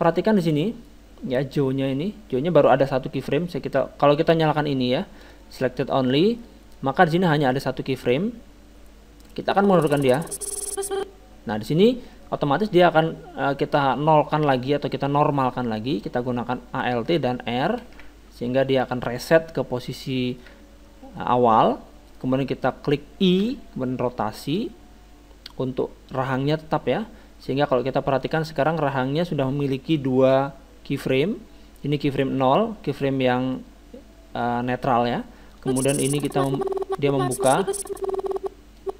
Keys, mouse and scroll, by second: 0.1-2.0 middle drag, 5.2-6.9 drag, 5.9-7.7 middle drag, 8.0-11.1 drag, 13.8-15.5 middle drag, 17.9 alt+r, 20.1-23.2 middle drag, 23.4 i, 28.2-30.1 drag, 33.6-35.4 middle drag, 35.6-37.4 drag.